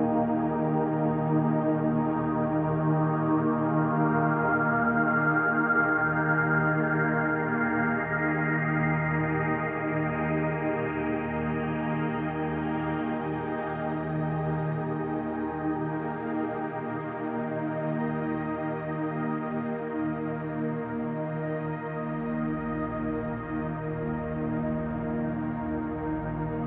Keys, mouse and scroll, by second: 0.0 scroll down 1, 0.2-1.2 middle drag, 1.6-2.8 shift+middle drag, 3.2-3.9 shift+middle drag, 4.1-4.5 scroll down 1, 4.5-7.9 middle drag, 8.3 middle click, 9.9 shift+a, 11.7-12.4 scroll down 2, 13.7 Tab, 14.4 s, 14.9 2, 15.3 5, 15.8 click, 16.9-19.3 drag, 19.7 middle click, 20.9 Tab, 21.4-21.7 scroll down 1, 21.7-22.5 shift+middle drag, 22.7-23.2 shift+middle drag, 24.1 click, 25.7 click, 26.1 click, 26.4 click.